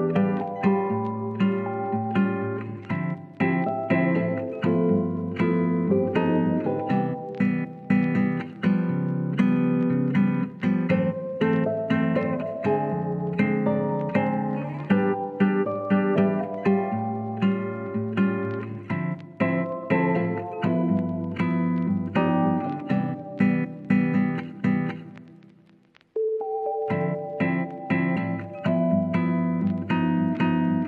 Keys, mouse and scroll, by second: 0.2 KP_0, 1.1 click, 2.1 s, 2.5-5.6 drag, 5.6 s, 6.0 y, 7.3 shift+click, 7.7 click, 8.5-9.4 scroll up 1, 9.4 middle click, 10.0 middle click, 10.0 scroll up 1, 11.1-12.8 drag, 12.8 Tab, 13.1-14.3 middle drag, 14.7 KP_3, 15.4 shift+middle click, 15.8 click, 16.7 r, 18.4 KP_1, 19.5 s, 21.3-22.4 middle drag, 22.6 KP_3, 23.7 s, 23.9 z, 24.4-25.3 drag, 25.3 s, 25.5 y, 26.5-27.2 drag, 28.5 r, 30.1-30.6 middle drag.